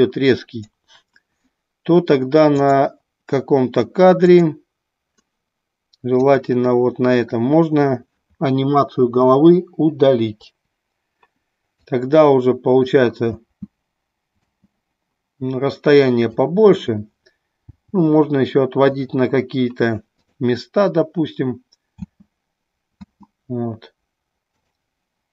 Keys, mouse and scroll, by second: 2.5 click, 4.3 click, 6.2 click, 11.9-13.0 drag, 16.3-16.8 drag, 16.3 space, 20.1 click, 24.5 click.